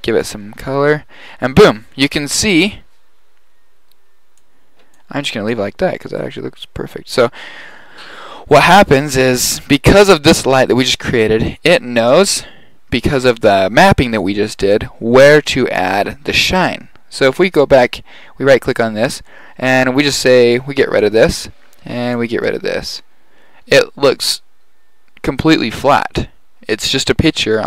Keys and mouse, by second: 4.4 click, 17.9 right click.